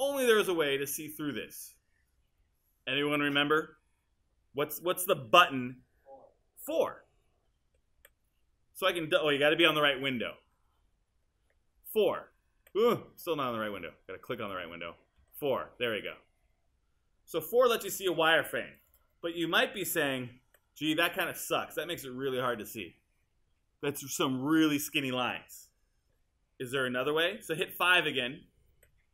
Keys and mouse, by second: 8.0 4, 11.2 5, 12.1 4, 13.1 5, 15.2 4, 18.8 click, 20.5 5, 28.8 5.